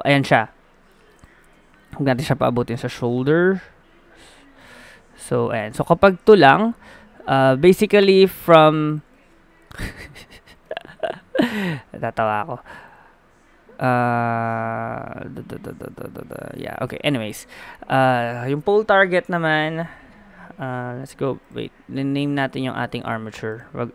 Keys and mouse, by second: 1.4 ctrl+z, 1.8-5.9 drag, 5.5 right click, 5.9 g, 9.2 ctrl+z, 10.5-14.7 drag, 16.7 middle click, 17.6 middle click, 19.2-21.6 drag, 23.5-23.9 drag.